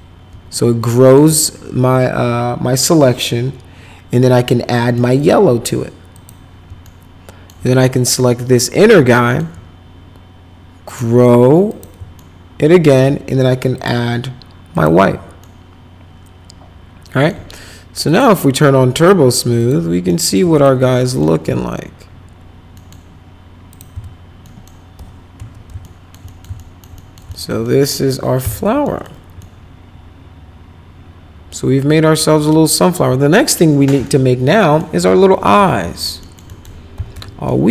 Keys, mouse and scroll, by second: 0.5 alt+right click, 1.0 alt+middle click, 4.7 middle click, 5.1 click, 6.1 click, 6.8 alt+middle click, 7.9 click, 9.1 alt+middle click, 10.9 click, 11.7 click, 12.1 alt+middle click, 13.7 click, 14.7 click, 15.4-17.2 alt+middle drag, 18.0 click, 19.6 click, 20.1 alt+middle click, 20.5 click, 20.9 alt+middle click, 21.5 z, 22.7 middle click, 23.7 click, 23.9 z, 24.4 middle click, 24.9 p, 25.3 z, 25.8 alt+middle click, 26.2 middle click, 26.6 alt+middle click, 26.9 middle click, 27.3 alt+middle click, 27.6 middle click, 27.9 middle click, 28.4 F4, 28.8 middle click, 29.4-32.9 alt+middle drag, 34.0 alt+middle click, 35.8 alt+middle click, 36.2 alt+middle click, 36.4 middle click, 36.6-37.6 typing, 37.5 middle click.